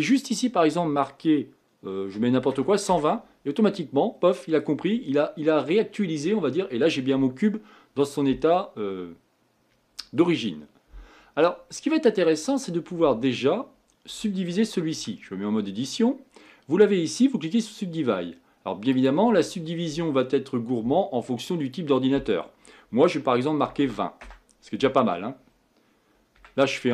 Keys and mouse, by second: 3.7-8.3 middle drag, 11.8-13.7 middle drag, 14.9 Tab, 17.6-24.2 drag, 26.3 Tab.